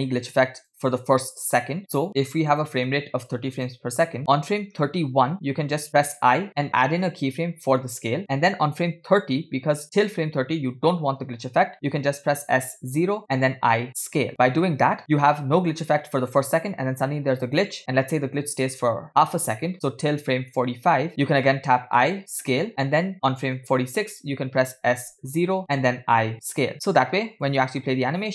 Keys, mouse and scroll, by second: 2.5-3.9 drag, 4.9 Right, 6.2 i, 8.9 Left, 12.9 s, 13.8 i, 14.8 drag, 15.2 space, 17.8 space, 19.1 Right, 19.1-21.1 Left, 21.1 Right, 22.0 i, 23.8 Right, 25.0 s, 26.0 i, 27.6 click.